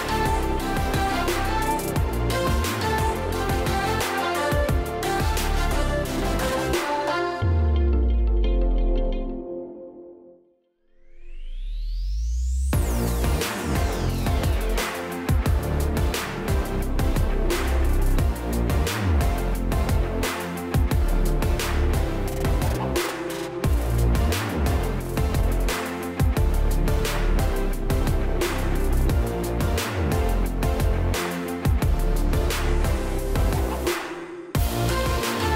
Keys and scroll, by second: 5.0 space, 11.9 space, 17.4-18.1 ctrl+space, 23.4 space, 32.8-33.7 space.